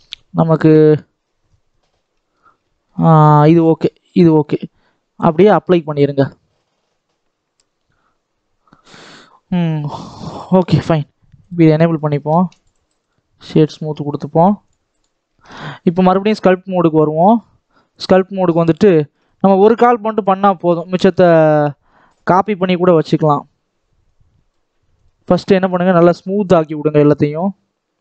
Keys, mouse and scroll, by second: 0.0-1.1 drag, 1.1-1.9 scroll down 11, 1.9 middle click, 2.3-3.6 scroll up 4, 2.6 shift+middle click, 3.6-7.3 middle drag, 7.3-8.8 drag, 8.8-9.9 scroll down 3, 9.9 click, 10.1 scroll down 1, 10.4 middle click, 11.3 click, 11.6 shift+middle click, 12.2 alt+a, 12.5 click, 12.6 right click, 13.3 middle click, 13.8-14.6 scroll up 1, 14.6-17.1 drag, 18.1-19.6 middle drag, 19.6 scroll up 1, 19.9-21.3 shift+middle drag, 21.3-21.6 scroll up 2, 21.6 middle click, 21.9-22.3 scroll up 1, 22.3-24.1 shift+middle drag, 24.1-28.0 drag.